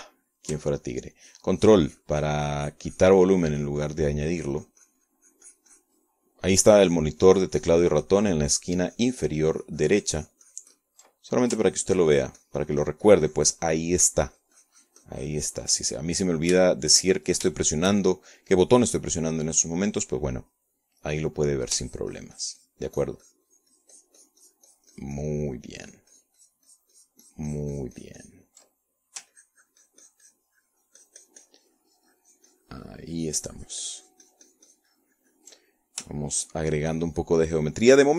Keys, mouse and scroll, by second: 0.1-1.5 middle drag, 1.5 shift+click, 2.9-8.3 ctrl+drag, 8.9-12.7 ctrl+drag, 17.5 ctrl+click, 18.3 shift+click, 18.4-20.2 shift+middle drag, 20.5 shift+middle click, 22.3 middle click, 23.5-24.6 ctrl+drag, 24.7-30.3 ctrl+drag, 30.4 ctrl+middle click, 31.1-37.3 ctrl+drag, 37.7-38.1 ctrl+shift+drag.